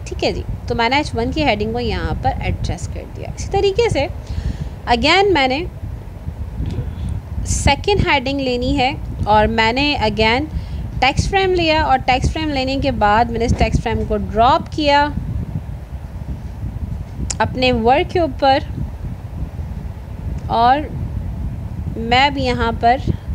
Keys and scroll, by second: 17.4 ctrl+z.